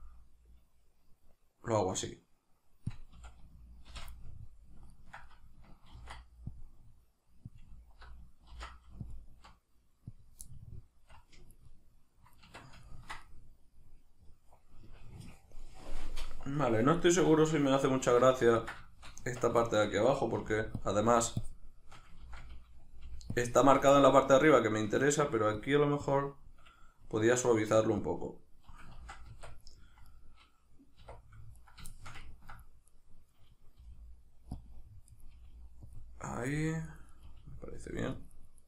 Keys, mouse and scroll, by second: 2.9 click, 3.1 a, 3.9 shift+n, 4.1-7.6 middle drag, 6.0 ctrl+r, 7.6 click, 8.5 ctrl+r, 10.2 click, 10.5-20.9 middle drag, 12.5 Tab, 18.0 alt+q, 19.2 Tab, 20.4 f, 20.9 click, 21.4-23.4 shift+drag, 22.2 ctrl+z, 24.0-25.6 shift+middle drag, 25.6-30.1 shift+drag, 29.0 ctrl+z, 29.3 Tab, 30.1 right click, 31.0 1, 31.5 right click, 31.9-32.9 shift+middle drag, 32.9 right click, 33.7 g, 34.6 click, 35.1 right click, 35.3 g, 35.9 click, 36.3 right click, 36.5 g, 37.1 right click, 37.2 g, 38.1 right click, 38.3 right click, 38.5 right click.